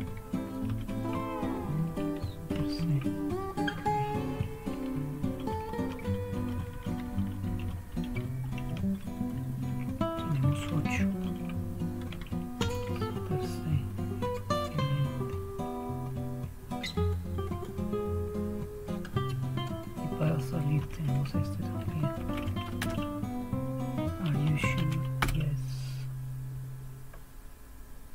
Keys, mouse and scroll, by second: 0.7 super+4, 2.6 super+c, 5.2 super+1, 5.9 super+2, 6.3 super+3, 6.7 super+4, 7.0 super+5, 7.5 super+6, 7.9 super+7, 8.4 super+8, 11.1 super+1, 12.6 super+c, 20.8 super+x, 22.2 Right, 22.3 Right, 22.8 Return, 24.2-25.2 typing.